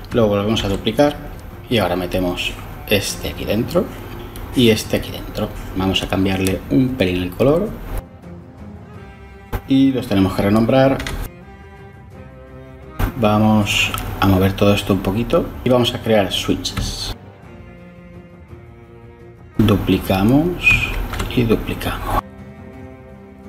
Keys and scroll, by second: 0.9 shift+d, 10.4 F2, 10.6 Left, 10.7-12.8 typing, 11.2 Delete, 11.2 Delete, 11.5 Return, 12.0 F2, 12.0 Right, 17.5 ctrl+shift+a, 17.7-18.6 typing, 20.6 shift+d.